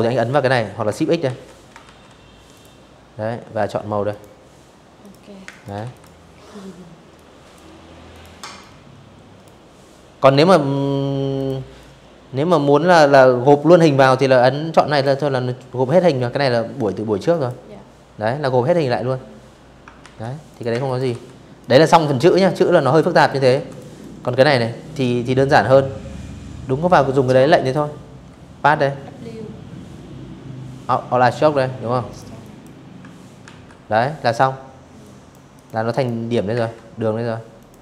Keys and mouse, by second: 0.2 click, 1.8 click, 2.7 click, 3.1 space, 3.2 click, 3.5 v, 3.6 click, 4.8 click, 5.8 click, 6.3 click, 9.0 click, 9.5 click, 12.6 click, 15.0 click, 17.7 ctrl+z, 18.2 click, 18.4 space, 18.5 click, 18.8 v, 19.3 click, 20.2 click, 20.8 space, 20.9 click, 21.2 v, 21.4 click, 21.7 click, 25.3 click, 29.8 click, 30.1 click, 31.1 ctrl+w, 32.7 click, 33.2 click, 33.6 click, 34.2 a, 35.2 click, 35.7 click, 36.5 ctrl+z, 36.7 a, 37.3 click, 37.6 click.